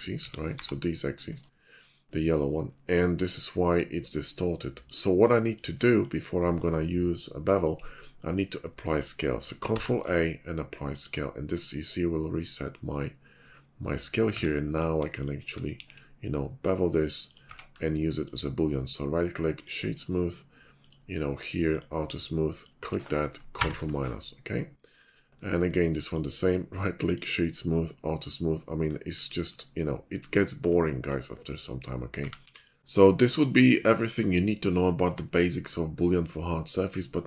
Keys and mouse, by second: 0.2 s, 1.5 middle click, 4.4-4.9 middle drag, 9.7 ctrl+a, 14.3 Tab, 15.7 ctrl+b, 16.9-18.8 drag, 17.4 Tab, 21.4 click, 21.9-25.4 drag, 23.5 ctrl+KP_Subtract, 28.1 click, 28.7-29.0 drag, 30.9 middle drag, 32.1 a, 32.4 x.